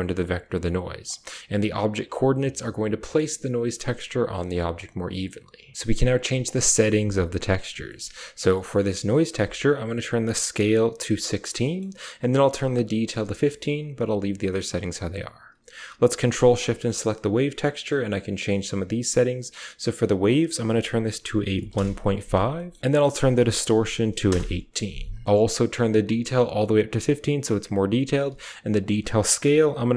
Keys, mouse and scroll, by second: 0.2 drag, 0.7-1.5 typing, 0.9 drag, 2.9 drag, 4.6 click, 7.8 middle click, 10.0 click, 11.5 click, 12.5 click, 14.3 middle click, 15.0 middle click, 15.0 click, 16.2 ctrl+shift+drag, 16.6 scroll up 1, 17.2 typing, 18.3-19.2 typing, 18.5 click, 20.0-21.6 drag, 22.5 click, 23.2 click, 25.8 click, 28.6-29.9 drag.